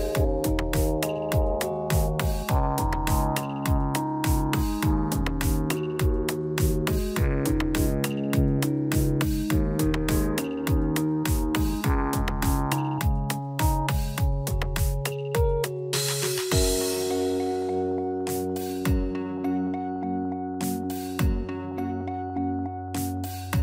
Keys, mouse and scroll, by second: 0.7 click, 0.7-1.1 scroll down 2, 1.1 middle click, 3.3 click, 3.6 Tab, 5.2 click, 6.8 shift+a, 13.4 click, 18.9 s, 20.7 middle click, 21.6 shift+middle click, 22.0-22.4 scroll up 5, 22.2 middle click, 23.2 s.